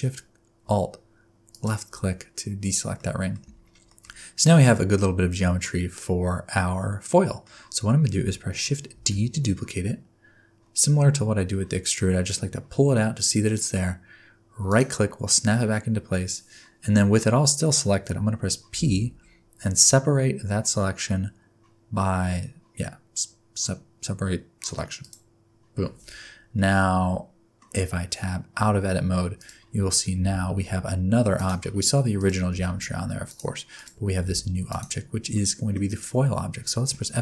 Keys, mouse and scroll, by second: 1.5 alt+shift+click, 2.3-2.9 scroll down 6, 2.9 middle click, 3.3-3.9 scroll down 4, 3.9 shift+middle click, 4.1-4.4 scroll down 2, 4.4 middle click, 7.7-8.2 scroll up 1, 9.0 shift+d, 18.7 p, 26.5 middle click, 28.6 Tab, 29.0-29.3 scroll down 3, 29.3 click, 30.1 g, 31.5 scroll down 1, 31.7-32.1 scroll up 4, 32.4 click, 32.5 g, 33.7 click, 34.2 g, 35.3 middle click, 36.9 F2.